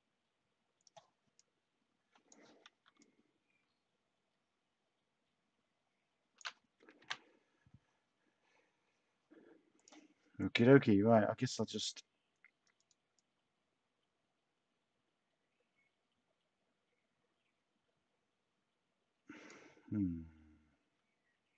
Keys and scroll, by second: 7.0 Delete.